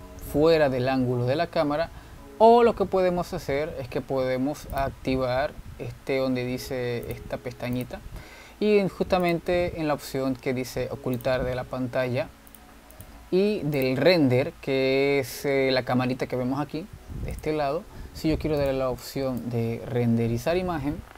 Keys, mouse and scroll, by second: 0.5 ctrl+z, 5.9-9.0 drag, 10.5 click, 13.6 click, 14.0 click, 14.9 click, 18.4 click, 19.9-21.1 drag.